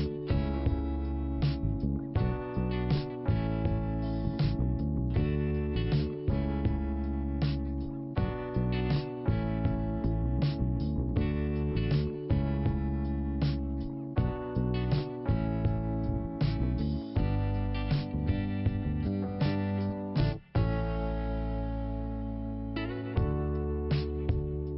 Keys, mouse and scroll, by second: 0.6 click, 0.7 click, 2.1 click, 2.2 click, 3.1 click, 3.4 click, 3.5 click, 3.6 double click, 7.6 click, 10.2 i, 11.1 middle click, 12.0 scroll up 2, 13.4 middle click, 14.7 scroll down 1, 16.7 middle click, 17.7 scroll up 2, 18.5 click, 18.5 click, 19.2-20.1 scroll up 2, 20.2 middle click, 20.7 scroll down 2, 21.6 click, 23.2 scroll up 2, 24.1 click, 24.2 click.